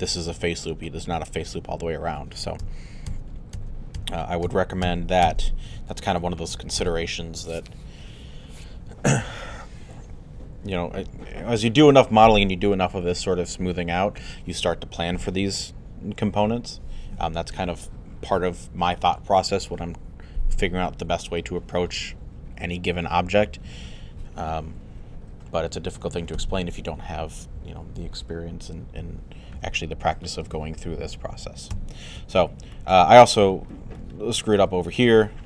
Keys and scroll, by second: 2.6 z, 5.7 alt+z.